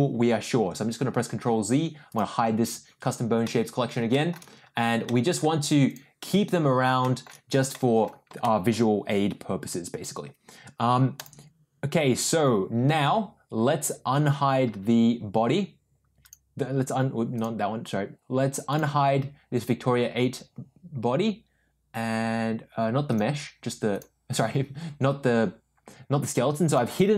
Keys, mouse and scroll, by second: 2.2 click, 3.4-3.9 middle drag, 4.1 shift+middle drag, 5.0 middle click, 5.8 click, 7.0 shift+middle drag, 7.7-8.0 middle drag, 8.4 shift+middle drag, 16.4 click, 17.5 click, 18.6 click, 23.0 click, 23.9 click, 26.6 click, 26.9 click.